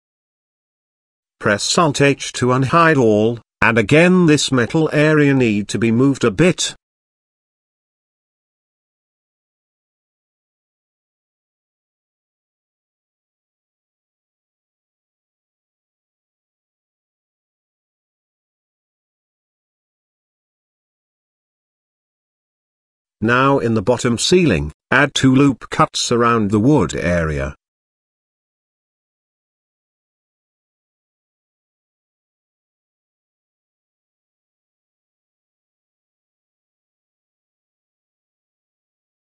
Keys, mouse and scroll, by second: 1.4 alt+h, 2.3 click, 2.8-3.7 middle drag, 4.0 click, 4.6 Tab, 5.6 click, 6.2 z, 6.7 middle click, 7.6 click, 8.5 shift+middle click, 9.6 g, 12.2 g, 13.5 g, 14.9 middle click, 15.7 z, 16.5 Tab, 17.1-19.9 middle drag, 20.3-20.6 shift+middle drag, 20.8-21.1 middle drag, 21.3-21.7 shift+middle drag, 21.9 click, 22.4 Tab, 23.7 ctrl+r, 27.9 middle click, 28.4 shift+middle click, 28.9 middle click, 29.7 KP_7, 30.5 z, 31.3 shift+middle click, 32.4 g.